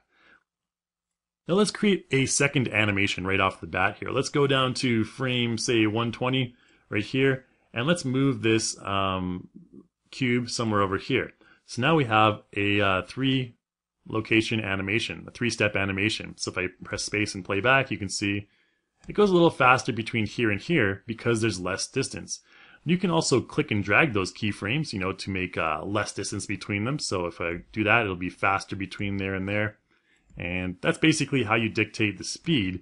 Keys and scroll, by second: 16.5 space, 26.6 space, 27.6 space.